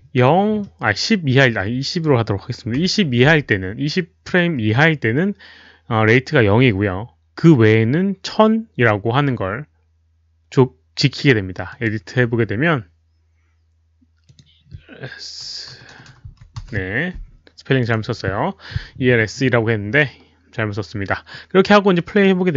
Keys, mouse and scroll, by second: 1.1-1.9 typing, 1.5 click, 2.0 ctrl+v, 2.0 ctrl+c, 2.0 Return, 5.8-6.6 typing, 6.1 click, 11.7 click, 14.2 click, 15.7 BackSpace, 17.6-19.7 typing, 17.8 click, 19.2 click, 21.7-22.4 typing, 21.9 click, 22.1 click.